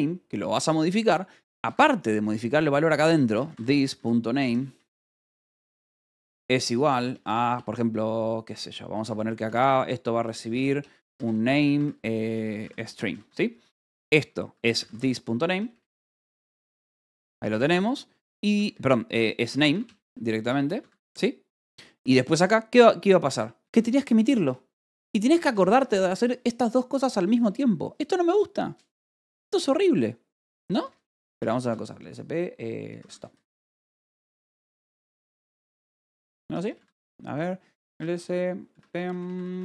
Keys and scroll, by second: 0.0 ctrl+g, 1.6 Escape, 1.8-7.4 typing, 8.4 Escape, 8.8-12.9 typing, 13.2 Escape, 13.9-26.0 typing, 20.7 Escape, 25.6 Escape, 31.0-33.9 typing, 35.6 shift+s, 35.8 Tab, 36.4 BackSpace, 36.7 Tab, 37.6 s, 37.8 Tab.